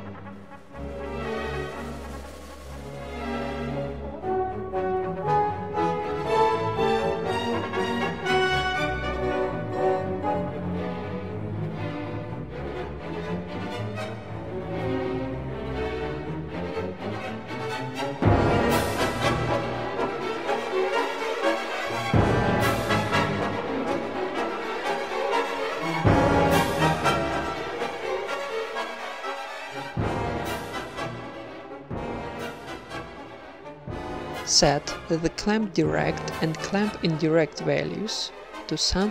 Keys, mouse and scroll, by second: 0.6 ctrl+s, 2.4-5.3 typing, 3.0 Tab, 4.7 right click, 6.5-7.8 right drag, 6.5 a, 6.6 a, 7.0 KP_1, 7.2 g, 8.2 Tab, 8.8 Tab, 9.1 Tab, 9.3 KP_0, 9.7 z, 10.1 ctrl+s, 14.4 z, 15.3 z, 16.3 shift+a, 17.7 ctrl+c, 17.9 ctrl+v, 18.7 ctrl+c, 18.9 ctrl+v, 23.5 shift+a, 28.1 ctrl+s, 35.0 Escape, 36.0 z, 37.8-39.1 drag.